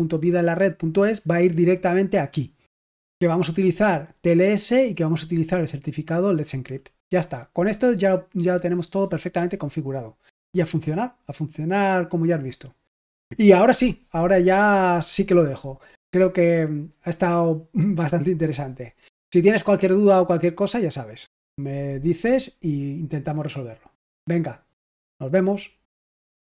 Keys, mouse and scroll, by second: 3.1 j, 4.7 j, 26.3 click.